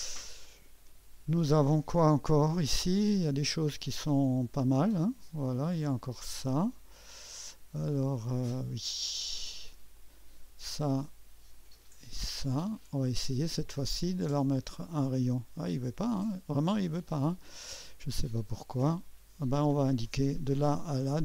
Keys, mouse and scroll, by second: 2.5-3.2 drag, 4.6-8.5 drag, 9.9 click, 11.5 click, 13.1 click, 14.3 click, 16.0 click, 20.0 click.